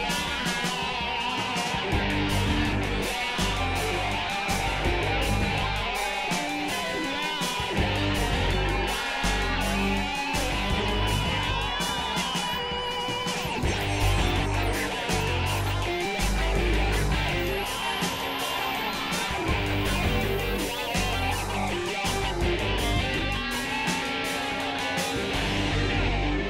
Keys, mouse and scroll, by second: 0.0 click, 0.7 ctrl+z, 1.1 ctrl+z, 1.5 click, 2.3 click, 4.0 click, 4.5 click, 5.3 click, 5.9 click, 6.6 click, 7.3 click, 8.5 click, 9.1-10.5 drag, 10.7-15.6 drag, 16.0-17.1 drag, 17.3 click, 19.0 click, 20.8 middle click, 21.7 KP_Divide, 22.1 middle click, 22.7 right click, 23.1 middle click, 23.6 right click, 24.2 KP_Divide, 24.3 Tab, 25.0 middle click, 25.7 KP_1.